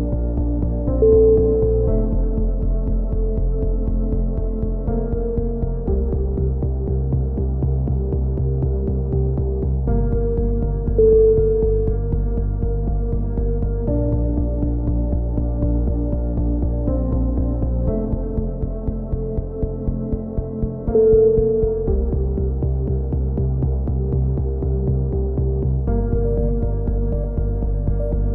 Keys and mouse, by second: 0.7-2.4 drag, 1.2-2.7 right drag, 2.4-3.6 typing, 3.4 right click, 4.4-4.9 middle drag, 4.9-6.6 drag, 6.6 KP_1, 6.9 e, 7.6 s, 9.0-12.0 drag, 11.7-12.0 middle drag, 12.0-12.9 right drag, 12.0 KP_1, 12.9 g, 15.9 a, 16.2 Tab, 16.4-16.9 middle drag, 17.7-18.4 drag, 18.6-19.7 drag, 19.5 Tab, 19.9-20.5 drag, 20.7-22.3 drag, 21.2-22.3 right drag, 22.3 ctrl+KP_1, 22.9 i, 24.2-25.0 drag, 25.0 KP_7, 26.7-27.3 drag, 27.3 a, 27.7-28.3 drag.